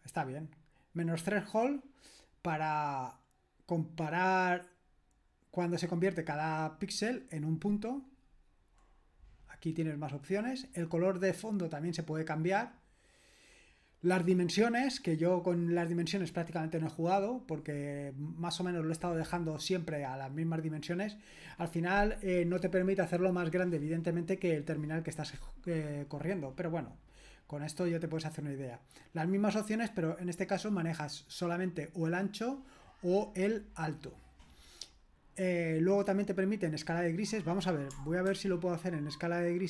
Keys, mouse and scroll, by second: 0.5-2.5 scroll down 1, 2.5-3.5 scroll down 1, 3.5-4.9 scroll down 1, 4.9-6.0 scroll down 1, 6.0-8.0 scroll down 1, 8.0-8.7 scroll down 1, 8.7-10.1 scroll down 1, 10.1 scroll down 1, 13.5-15.1 scroll down 2, 15.1-16.5 scroll down 1, 16.5-23.0 scroll down 1, 23.0-23.8 scroll down 1, 23.8-25.1 scroll down 1, 25.1-27.0 scroll down 1, 27.0-28.6 scroll down 1, 32.4-34.3 scroll down 2, 34.9-35.6 scroll down 1, 35.6-37.0 scroll down 1, 37.0 click, 38.3 ctrl+p.